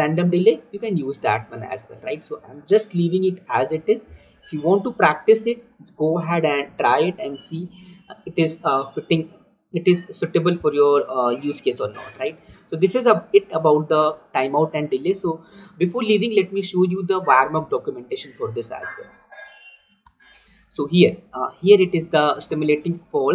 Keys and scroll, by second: 2.3 Escape, 3.2 ctrl+z, 6.4 ctrl+z, 19.1 alt+Tab.